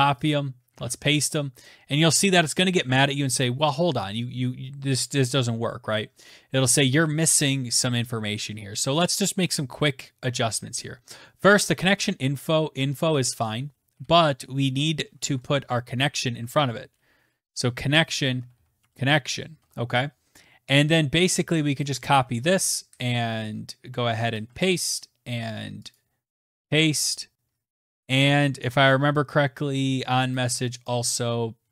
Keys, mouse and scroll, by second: 0.1 click, 0.6 ctrl+v, 13.1 click, 13.8 Left, 15.2-19.4 typing, 21.6 shift+click, 22.2 ctrl+c, 24.2 click, 24.4 ctrl+v, 25.8 click, 26.3 ctrl+v, 27.2-27.6 scroll down 5, 28.4-30.0 scroll down 8, 31.5 click, 31.5 scroll, 31.5 ctrl+v.